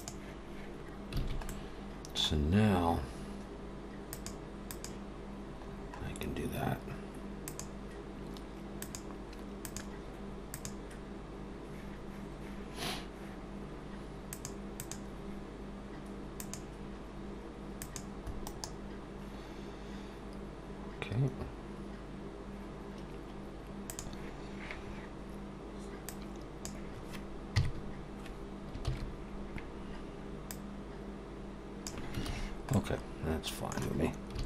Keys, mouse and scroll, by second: 0.4 click, 1.2 alt+a, 1.5 middle click, 4.0 click, 4.7 click, 5.7-6.2 scroll up 4, 7.4 click, 8.8 click, 9.8 click, 10.6 click, 14.2 click, 15.0 click, 16.3 click, 17.7 click, 18.4 right click, 26.1 click, 27.5 KP_3, 28.9 ctrl+z, 30.5 click, 32.3 ctrl+z, 32.7 middle click, 34.4 alt+a.